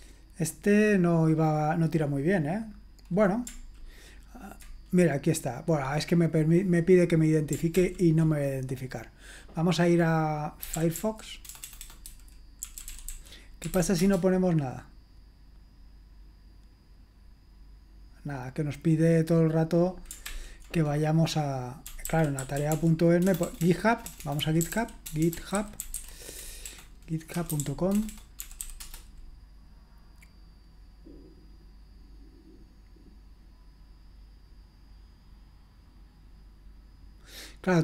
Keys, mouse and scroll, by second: 0.7 click, 1.2 click, 1.8 click, 2.1 click, 2.4 click, 7.8 ctrl+l, 10.4-14.2 typing, 20.3 ctrl+l, 21.6-29.1 typing.